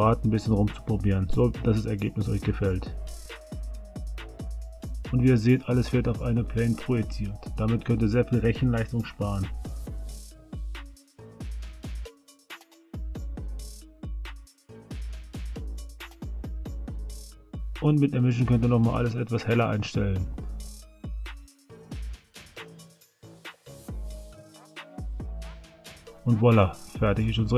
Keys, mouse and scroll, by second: 0.1 click, 0.1 space, 2.5 drag, 3.9 s, 5.5 space, 8.6 space, 10.7-12.4 middle drag, 13.5 KP_1.